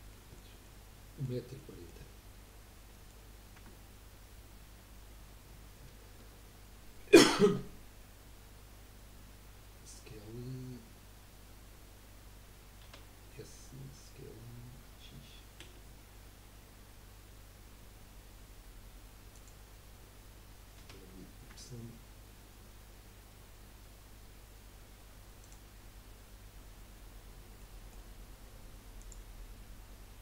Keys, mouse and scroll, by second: 0.1-4.7 middle drag, 4.7 Tab, 7.6 scroll up 2, 10.3 scroll down 1, 12.8 s, 21.5 s, 22.3-25.2 drag, 22.3-25.2 middle drag, 22.3-25.2 right drag, 25.8-26.6 scroll up 2, 27.7-29.0 middle drag, 29.0 click.